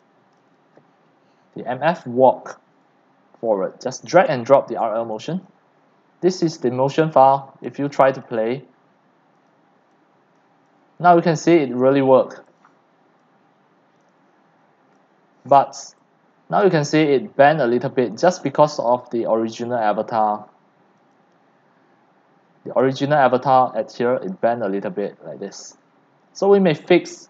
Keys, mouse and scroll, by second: 1.9 click, 3.4 click, 7.2 scroll down 8, 7.6 middle click, 7.6 x, 8.2-9.8 drag, 10.2-11.7 typing, 10.3 click, 11.5-13.2 drag, 13.2-14.0 c, 14.2 click, 14.4-14.8 scroll, 15.8 right click, 15.9 click, 16.0 x, 16.3 c, 16.6-17.6 drag, 17.6 c, 18.1 click, 18.3 c, 18.3 c, 18.6 c, 18.8-23.8 drag, 24.3 click, 24.4 c, 24.4 c.